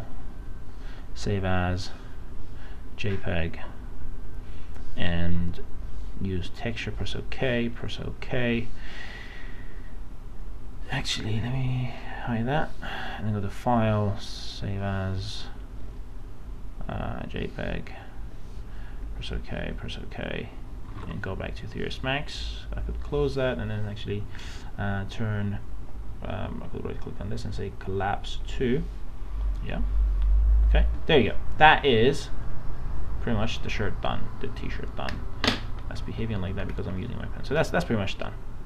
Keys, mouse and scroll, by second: 12.3 click, 21.1 alt+Tab, 23.1 click, 26.9 right click, 28.6 click, 32.9 click, 33.7-34.0 scroll down 1, 34.0 scroll up 1, 36.3 middle click, 36.7 scroll down 1.